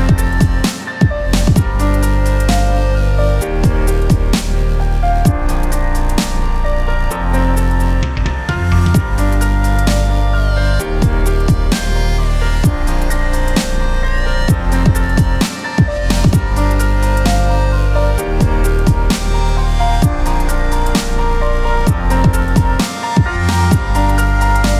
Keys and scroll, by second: 14.5 b, 17.7 ctrl+i, 18.2 ctrl+=, 19.1 ctrl+KP_Subtract, 21.5 j, 22.0 space.